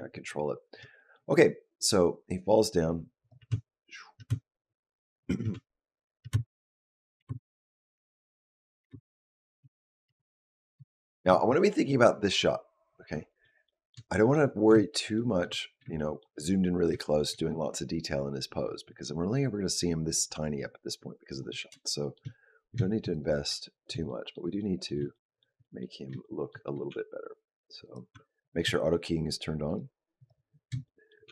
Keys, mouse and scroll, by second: 0.8 shift+middle click, 1.9 click, 3.3 space, 4.1 space, 5.1 click, 5.3 space, 6.2 space, 6.7 click, 7.0 space, 8.7 space, 9.1 click, 9.4 space, 10.0 space, 10.3 click, 13.5 shift+middle click, 14.0 middle click, 15.0 shift+middle click, 15.4 scroll up 2, 15.8 shift+middle click, 16.2-16.7 scroll up 3, 17.0 shift+middle click, 17.6 middle click, 21.6-22.0 shift+scroll down 1, 22.0 shift+middle click, 22.6 scroll up 1, 22.9 click, 23.4 shift+middle click, 23.7 scroll down 1, 23.9 middle click, 24.4 middle click, 24.9 shift+middle click, 25.4 middle click, 26.0 shift+middle click, 26.7 g, 27.9 r, 29.5 click, 30.7 shift+middle click, 31.1 g.